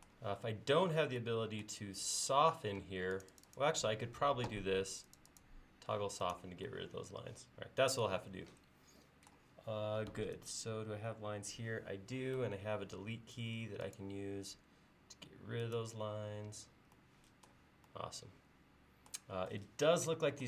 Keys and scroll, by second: 2.8 space, 13.0 Delete, 14.4 BackSpace, 16.4 BackSpace.